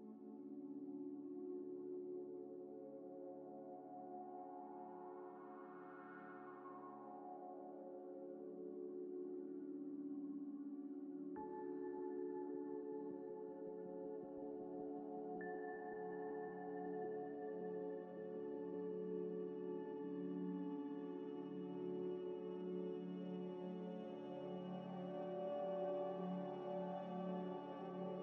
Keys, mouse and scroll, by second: 0.4-2.1 typing, 2.7 Tab, 3.3 ئ, 3.6 middle click, 4.1 middle click, 4.1 scroll down 1, 4.4 Tab, 4.6 Tab, 4.9 3, 6.8 scroll up 1, 6.8 g, 8.4 ctrl+z, 8.8 scroll up 1, 8.9 middle click, 9.4 scroll down 1, 9.8 middle click, 10.0 scroll down 1, 10.4 scroll up 1, 11.3 ه, 13.0 ctrl+ئ, 13.5 Tab, 14.2 ذ, 14.8 Escape, 15.0 scroll down 1, 15.5 Tab, 15.9 shift+a, 16.0 shift+ش, 16.5 Tab, 17.0 shift+ش, 18.6 Tab, 18.9 Tab, 18.9-27.0 typing, 21.0 Return, 21.4 Return, 22.9 scroll up 1, 27.6 middle click.